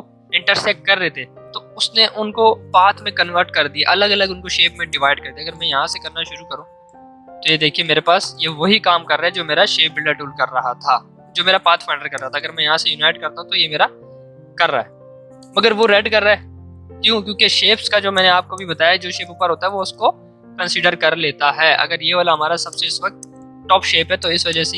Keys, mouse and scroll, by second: 4.8-7.4 drag, 9.2 v, 9.7 ctrl+z, 12.1 click, 14.4 ctrl+z, 15.8 click, 15.8-22.3 drag, 22.6-24.7 drag.